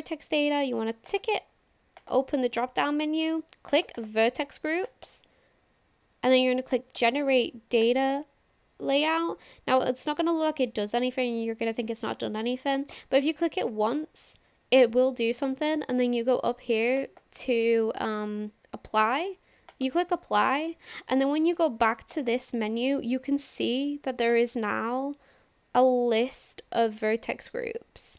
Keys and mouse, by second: 1.1 click, 3.7 click, 4.0 click, 4.9 click, 6.7 click, 8.0 click, 12.7 click, 17.0-19.9 drag, 22.1 click, 24.3-28.1 drag.